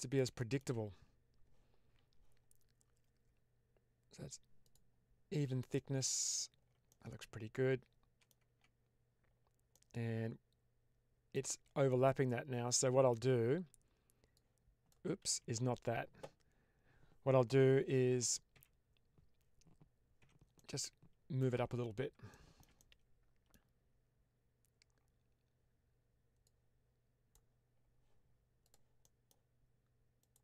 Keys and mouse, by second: 0.3 shift+middle click, 4.5 click, 5.6-6.3 middle drag, 6.8-8.2 middle drag, 8.3 Tab, 9.7-11.3 middle drag, 11.8-13.0 middle drag, 14.2 click, 15.3 ctrl+z, 18.0 w, 18.4 w, 20.1 1, 20.4 middle click, 22.2 shift+middle click, 22.7 middle click, 26.4 click, 28.5 click, 28.9 middle click, 30.1 click.